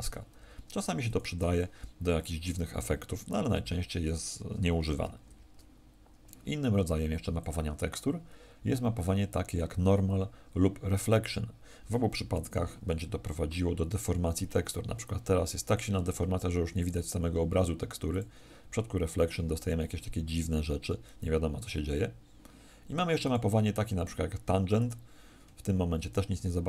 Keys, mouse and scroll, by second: 0.3 r, 1.1 click, 3.5 Escape, 5.2 alt+r, 7.3 click.